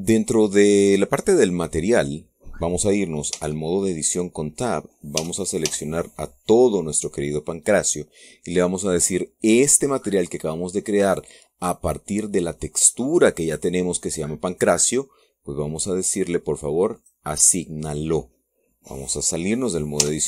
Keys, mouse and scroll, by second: 1.2-1.6 scroll up 1, 4.1 Tab, 5.9 a, 9.3-9.7 scroll up 2, 9.7-17.7 middle drag, 17.7 click.